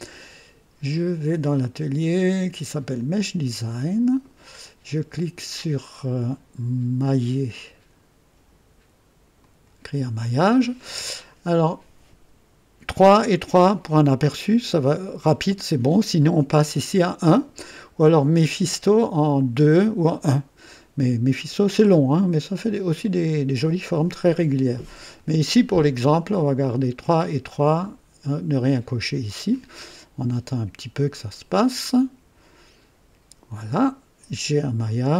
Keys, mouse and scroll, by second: 1.5 click, 2.9 click, 9.3 click, 18.4 click, 25.1 click, 28.9 click.